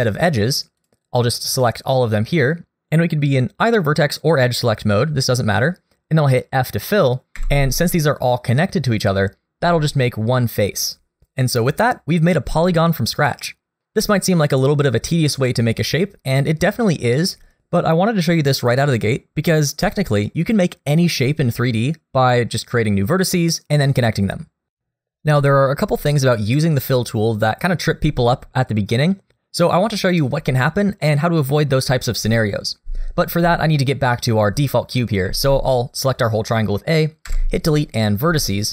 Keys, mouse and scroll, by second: 0.8 click, 1.2 click, 7.4 f, 20.4 shift+middle click, 35.3 a, 37.3 Delete.